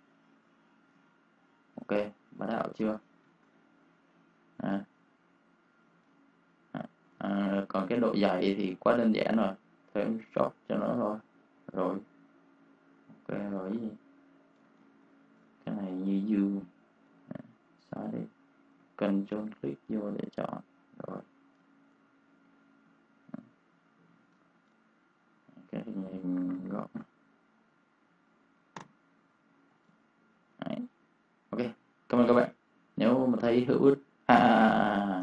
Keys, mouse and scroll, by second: 0.8 space, 1.0 click, 1.6 space, 1.7 click, 2.2 space, 2.5 click, 3.1 shift+o, 4.3 click, 5.5 v, 5.8 click, 6.0 space, 6.0 click, 6.1 click, 7.1 ctrl+space, 7.3 ctrl+click, 8.1 space, 8.5 click, 11.6 space, 11.8 click, 14.7 ctrl+click, 15.9 ctrl+click, 16.9 Delete, 19.0 ctrl+click, 19.7 Delete, 21.1 ctrl+1, 21.5 space, 21.6 click, 22.4 ctrl+click, 23.8 ctrl+alt+2, 24.2 space, 24.3 click, 26.0-26.9 typing, 28.6 Return, 29.3 v, 29.6 click, 29.8 space, 29.9 click, 34.4 click, 34.4 space, 34.7 click.